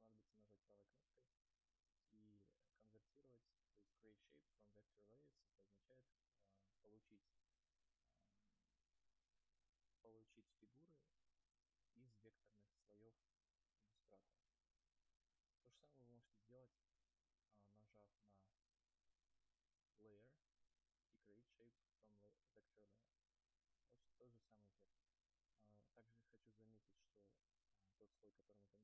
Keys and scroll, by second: 16.8 ctrl+z.